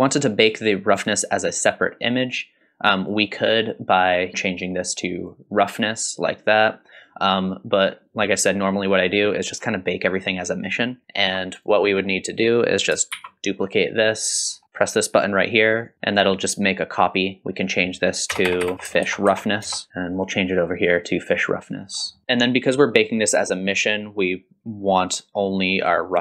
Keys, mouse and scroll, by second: 3.0 click, 4.0 click, 4.3 middle click, 4.3-5.3 drag, 7.0-9.8 drag, 11.0 middle click, 11.0-11.5 scroll down 1, 11.5 click, 11.9 scroll up 2, 13.2 shift+d, 14.5-15.0 scroll up 4, 15.7 click, 18.5-19.9 drag, 18.5-19.9 typing, 19.9 scroll down 2, 20.1-21.3 drag, 21.9 scroll down 2, 22.1 middle click, 23.1 scroll up 1.